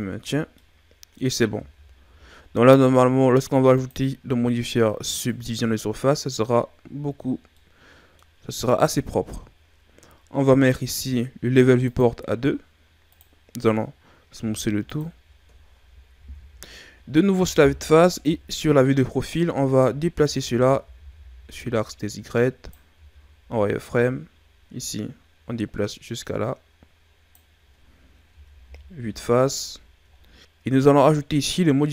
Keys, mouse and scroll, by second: 0.2-0.5 scroll down 1, 0.5-1.5 middle drag, 1.5 Tab, 3.7 click, 7.5 middle click, 8.5-11.4 scroll up 1, 11.8 click, 14.3 w, 16.1 KP_1, 18.2 KP_3, 19.2-19.6 scroll down 3, 19.6-20.2 ctrl+scroll up 3, 20.2 Tab, 20.6 a, 20.9 a, 21.5 click, 22.9 z, 23.8 click, 28.2 z, 28.6 KP_1, 29.6 scroll down 2, 30.1-30.4 ctrl+scroll up 4, 30.4-31.6 shift+scroll down 1, 31.6-31.9 scroll up 1.